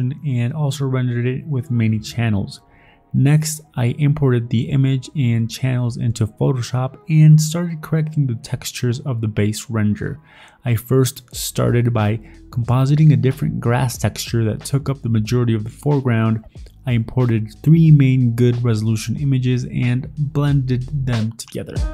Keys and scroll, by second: 3.8 Delete, 4.4 Delete, 8.7 alt+Tab, 10.6 alt+Tab, 12.0-13.5 typing, 15.4-16.2 typing, 16.8 alt+Tab, 16.9 ctrl+v, 17.2 ctrl+t, 17.4 ctrl+u, 17.9 ctrl+u, 18.2 alt+Tab, 18.3-19.2 typing, 19.5 Tab, 19.5 ctrl+v, 19.8 ctrl+t, 20.2 alt+Tab, 21.0 alt+Tab, 21.1 ctrl+v, 21.2 ctrl+t, 21.6-21.9 typing.